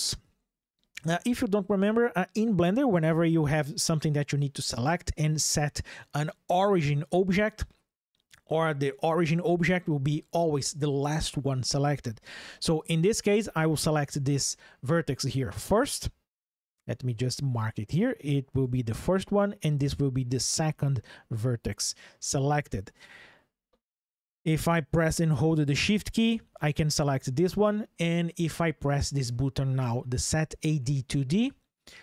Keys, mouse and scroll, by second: 13.7 click, 17.1 ctrl+shift+3, 31.0 click.